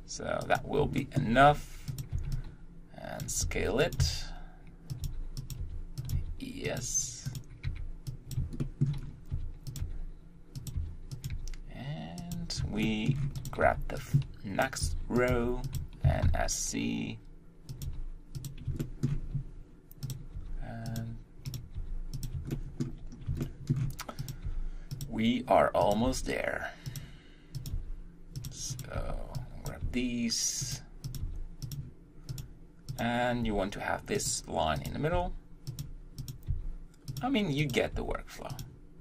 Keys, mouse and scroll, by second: 0.4 g, 1.0 shift+middle click, 1.4-2.0 scroll up 1, 2.0 click, 3.2 b, 4.9 s, 5.4 g, 6.0 r, 6.7 s, 7.3 click, 8.3 b, 8.6 shift+middle click, 9.0-9.3 scroll up 2, 9.3 r, 9.8 g, 11.2 r, 11.3 g, 12.9 shift+middle click, 13.4 click, 14.6 b, 14.8 r, 15.3 g, 17.7 s, 17.9 g, 18.8-20.1 shift+middle drag, 20.1 click, 20.4 g, 21.5 click, 21.8 g, 22.5-23.7 shift+middle drag, 23.7 shift+scroll, 24.3 click, 24.5 g, 25.9 click, 26.1 g, 27.7 g, 28.8 click, 29.7 b, 29.8 g, 31.2 click, 31.7 g, 32.4 click, 33.0 click, 33.4 g, 34.8 click, 35.1 g, 36.3 click, 36.5 g, 37.7 click, 38.0 g.